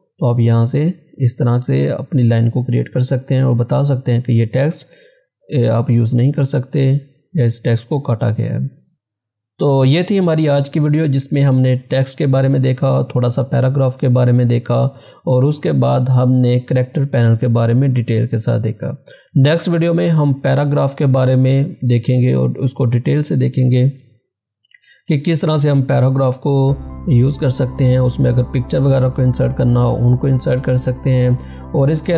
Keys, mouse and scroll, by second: 8.9 click.